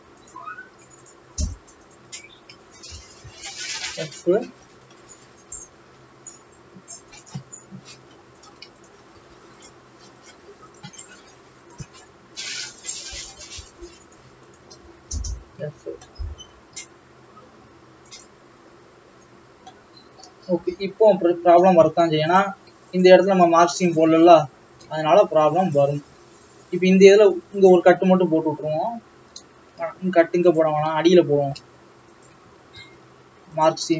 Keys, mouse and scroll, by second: 0.4 alt+shift+click, 1.1 shift+click, 1.7 shift+click, 2.0 shift+click, 3.0 shift+click, 3.3 f, 3.5-3.8 scroll down 2, 3.8-6.6 middle drag, 6.6-7.3 scroll up 1, 7.3 click, 7.8-8.5 scroll down 1, 8.5 click, 8.9 shift+click, 9.8 x, 11.9 click, 12.6 click, 13.1 shift+click, 13.5 shift+click, 13.9 shift+click, 14.3 shift+click, 14.6 shift+click, 15.0 f, 15.6 alt+a, 16.3 middle click, 16.9 a, 18.4 u, 19.8-21.9 middle drag, 21.9 alt+a, 22.5 click, 23.1 shift+click, 24.0 shift+click, 24.7-25.8 middle drag, 25.8 shift+click, 27.7 shift+click, 31.2-32.4 middle drag, 32.4 shift+click, 33.6 ctrl+e.